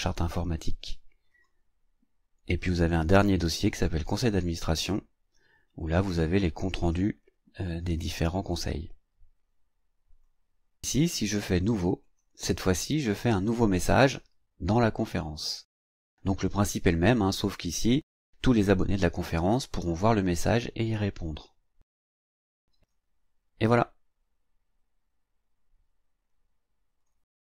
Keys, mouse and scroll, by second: 1.3 click, 2.6 click, 3.5 click, 10.1 click, 12.0 click, 24.3 click, 26.3 click.